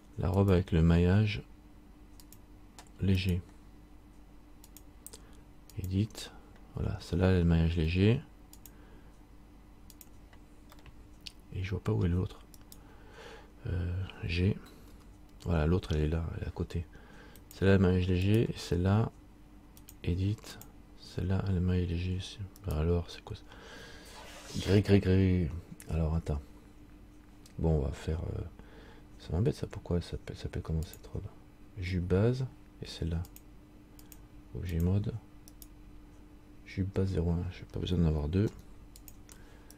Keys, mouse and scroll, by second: 0.5 click, 3.4 right click, 4.8 click, 8.7 click, 10.2 click, 10.9 middle click, 12.7 right click, 18.4 right click, 19.9 click, 22.7 right click, 31.0 click, 35.7 right click, 38.6 Delete.